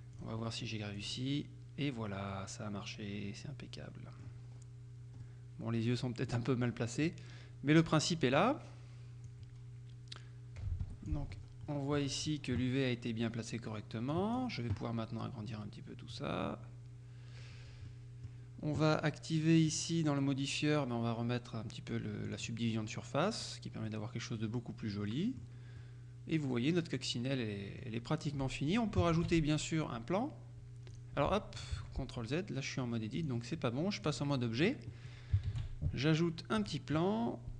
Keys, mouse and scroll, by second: 0.2 click, 1.0 click, 2.4-4.6 middle drag, 5.3-6.8 middle drag, 7.1-8.4 middle drag, 9.3-11.4 drag, 10.9 Escape, 11.4-12.9 scroll down 1, 14.2 click, 16.2 click, 17.6-18.0 scroll down 2, 18.0 click, 19.8 click, 22.4 click, 22.9-23.5 scroll up 1, 24.0-26.0 middle drag, 28.3-28.9 scroll down 1, 29.2 shift+a, 31.0 click, 31.8 ctrl+z, 33.2 click, 34.1 click, 35.6 shift+a, 36.6 click.